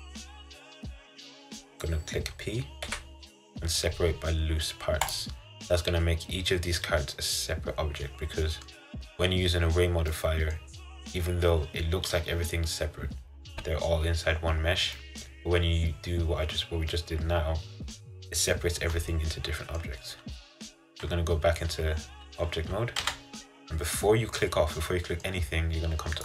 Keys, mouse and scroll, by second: 5.2 p, 5.8-8.8 middle drag, 10.3-18.1 middle drag, 18.8-23.2 middle drag, 23.2 Tab, 24.5-26.2 middle drag.